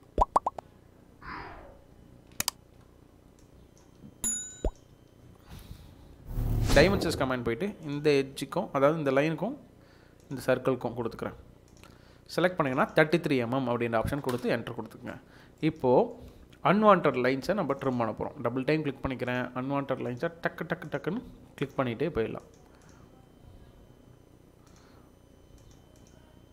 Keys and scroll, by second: 1.2 Escape, 3.9 Delete, 5.5 Delete, 13.9 typing, 15.2 Escape.